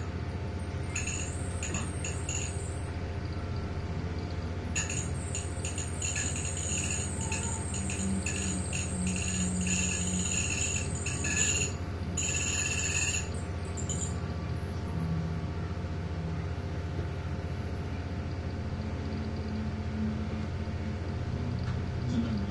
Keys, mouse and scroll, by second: 0.0 click, 1.6 ctrl+g, 4.1 click, 5.6 click, 7.5 click, 9.8 click, 10.7 click, 11.8 click, 13.2 click, 15.8 click, 16.6 click, 17.5-18.3 scroll down 1, 18.5-19.3 scroll up 1, 19.5-20.4 scroll down 1, 21.8 shift+F11.